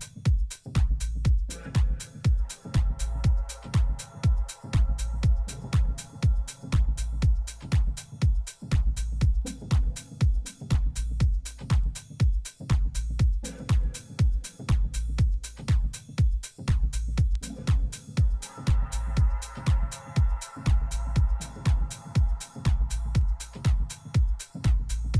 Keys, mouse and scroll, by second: 2.7 KP_1, 3.7-5.4 middle drag, 4.5 z, 8.4-10.9 middle drag, 10.9 z, 11.3-14.0 middle drag, 15.5 a, 15.9 a, 17.2 shift+a, 23.4 F6.